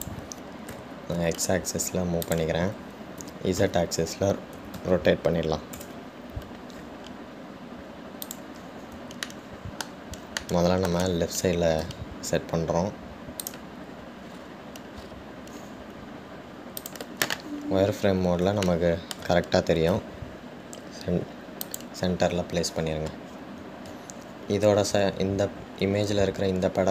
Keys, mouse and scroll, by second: 9.4 click, 10.4-13.0 shift+middle drag, 13.0 g, 15.6-16.2 scroll up 3, 16.2-16.9 scroll up 9, 18.2 click, 19.2 middle click, 19.2-19.7 scroll up 3, 19.8-21.1 shift+middle drag, 21.1 g, 23.4-25.6 scroll down 10, 25.6-26.9 scroll down 1.